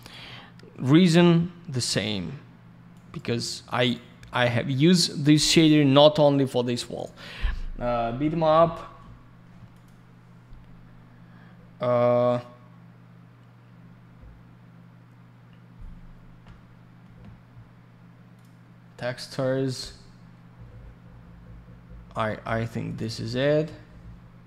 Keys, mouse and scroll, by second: 1.2-1.5 scroll up 1, 1.7 click, 1.8 click, 2.9 click, 3.9 click, 4.8 click, 9.7 click, 9.8 click, 18.3 click, 18.4 click, 22.9 click.